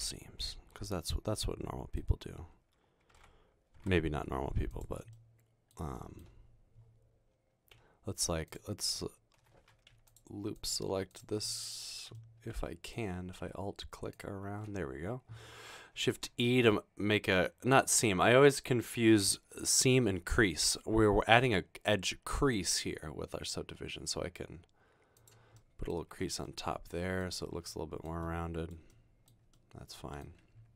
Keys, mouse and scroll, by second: 3.1-4.3 typing, 12.2 middle click, 16.4 e, 26.3 Tab, 30.0 middle click.